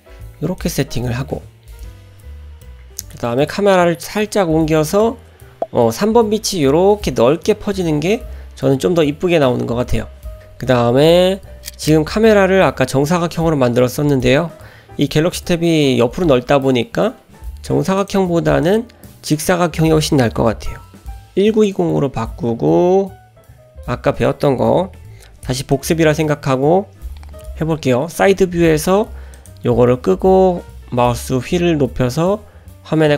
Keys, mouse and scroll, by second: 2.0 middle click, 2.0-2.5 scroll up 1, 2.6 middle click, 2.6-3.2 scroll down 1, 3.4 middle click, 18.0 click, 18.6 click, 19.3-22.0 drag, 25.7 click, 27.3 n, 29.4 click, 30.4-30.9 scroll up 1, 31.4-31.9 scroll up 1, 32.1-32.6 scroll up 1.